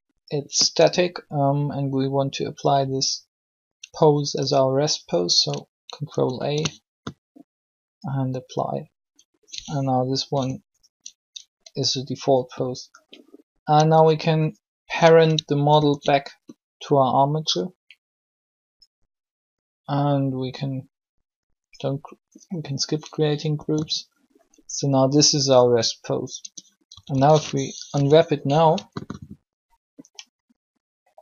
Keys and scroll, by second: 6.2 ctrl+a, 10.3 r, 15.6 ctrl+shift+p, 23.5 r, 26.4 Tab, 26.6-27.9 typing.